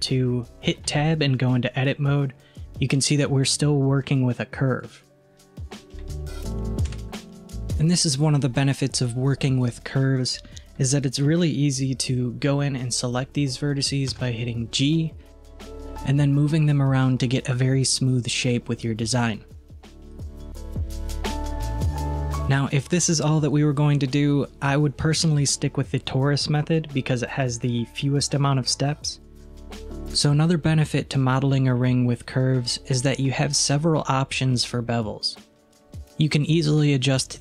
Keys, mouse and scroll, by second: 0.9 Tab, 1.6-4.4 middle drag, 4.4 click, 6.9 KP_1, 15.2 click, 20.6 Tab, 21.0 scroll down 2, 21.3-22.2 middle drag, 22.2 scroll up 1, 23.0-23.6 scroll up 1, 23.6 scroll down 1, 36.4 click.